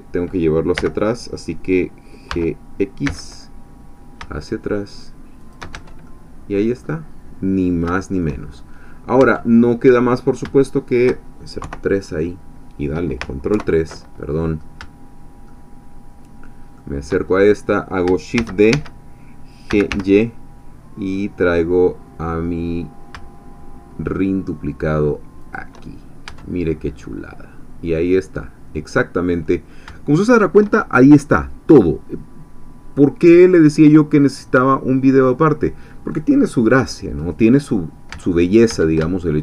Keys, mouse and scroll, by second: 0.8 l, 2.3 g, 3.1 x, 5.4 shift+click, 5.8 shift+Tab, 6.0 shift+middle click, 6.4 click, 7.1-7.8 scroll down 2, 7.9 shift+click, 8.5-9.2 shift+scroll up 3, 9.2 Tab, 9.8-10.4 scroll down 2, 10.6 shift+click, 11.6 3, 13.5 ctrl+3, 15.5-16.9 shift+middle drag, 17.3-18.0 shift+scroll up 1, 18.4 shift+d, 18.8 Escape, 19.5-20.4 typing, 25.4 shift+click, 25.9-26.9 shift+scroll down 5, 26.2 Tab, 27.0-29.8 drag, 38.2 Tab, 39.1 shift+click.